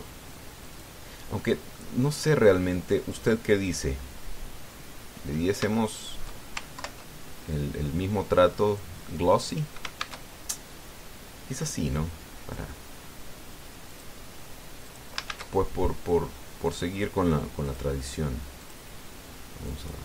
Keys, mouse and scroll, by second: 0.3 click, 1.4 click, 2.1 middle click, 3.9 click, 4.6-5.1 scroll down 1, 6.1-6.4 scroll up 1, 6.5 shift+middle click, 7.5 ctrl+Left, 9.5 click, 10.8 shift+a, 14.7 click, 15.6 click, 16.1 shift+a, 18.5 click, 19.4 click.